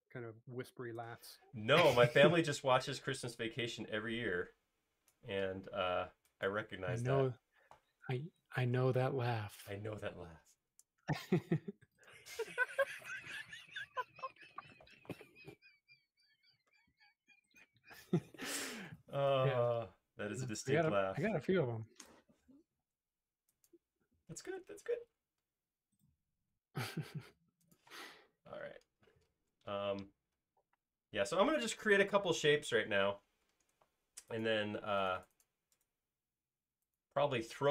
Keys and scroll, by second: 8.3 Escape, 28.6 space, 33.4 space.